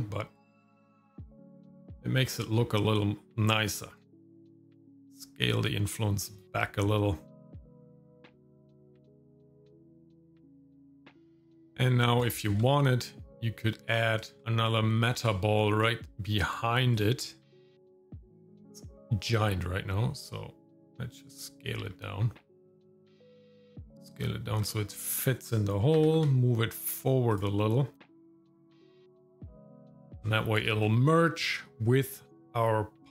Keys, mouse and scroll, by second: 4.2 click, 4.5-5.6 scroll down 5, 4.8-6.5 drag, 9.7-10.3 scroll up 4, 9.9 shift+middle click, 10.1 middle click, 10.3 shift+middle click, 11.1 shift+middle click, 11.3 middle click, 11.5 shift+middle click, 11.6 scroll up 1, 12.4 shift+middle click, 14.2 shift+click, 14.2 shift+right click, 14.4 shift+a, 17.4 shift+middle click, 17.4 s, 21.8 s, 22.7 shift+middle click, 22.9 g, 23.3 shift+middle click, 23.8 s, 24.2 shift+middle click, 24.7-26.0 scroll up 2, 26.0 g, 28.0 s, 28.4 g, 28.8 shift+middle click, 29.0 g, 29.7 g, 30.0 middle click, 30.2 scroll down 2, 30.2 shift+middle click, 30.8 scroll down 2, 31.1 shift+middle click, 31.5 middle click.